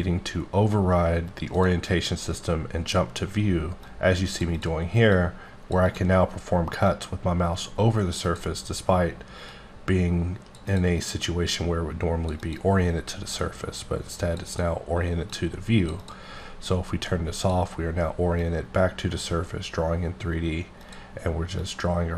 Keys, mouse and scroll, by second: 1.5 click, 3.8 click, 4.5 double click, 5.1 click, 5.9 double click, 6.8 click, 8.2 double click, 9.5 click, 10.7 double click, 11.5 click, 12.4 double click, 13.3 click, 14.4 double click, 15.3 click, 16.0 double click, 17.4 click, 18.4 click, 21.0 click, 21.6 click.